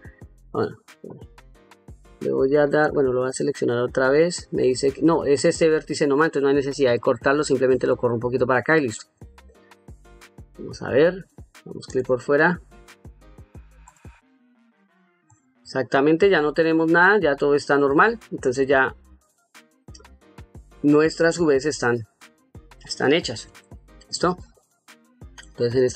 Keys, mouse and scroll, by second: 2.5 click, 3.9 click, 6.7 g, 7.7-8.7 drag, 9.8 ctrl+middle click, 11.7 click, 13.7-14.7 drag, 15.6 ctrl+middle click, 16.2 ctrl+middle click, 16.9 middle click, 19.3-20.7 drag, 21.3 ctrl+middle click, 22.2 middle click, 23.4 shift+middle click, 24.2 ctrl+middle click.